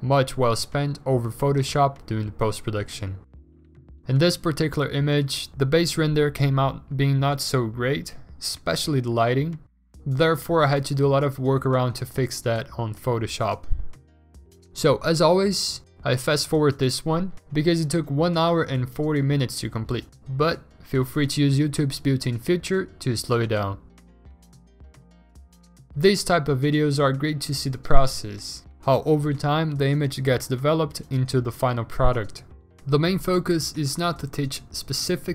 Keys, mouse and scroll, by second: 0.5 alt+Tab, 0.5 Return, 1.0 ctrl+t, 1.5 ctrl+z, 2.1 Return, 2.3 v, 3.2 ctrl+t, 3.7 v, 3.9 ctrl+t, 4.5 v, 6.3 ctrl+u, 8.3 b, 9.0 3, 9.2 ctrl+z, 9.3 1, 10.0 ctrl+z, 11.1 ctrl+alt+z, 11.3 ctrl+alt+z, 12.2 b, 12.9 0, 13.6 ctrl+z, 15.1 ctrl+z, 15.6 ctrl+z, 16.5 m, 18.6 alt+BackSpace, 18.7 ctrl+d, 26.8 b, 29.6 ctrl+z, 30.2 ctrl+z, 32.2 ctrl+z.